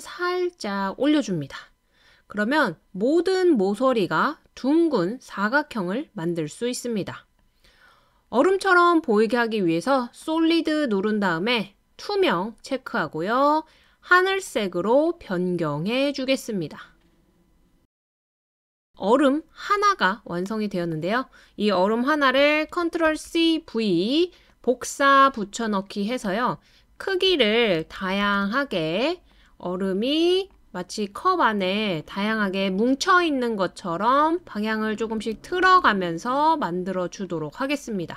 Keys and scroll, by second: 22.7 super+c, 23.1 super+v, 28.0 super+c, 28.2 super+v, 35.3 super+c, 35.6 super+v.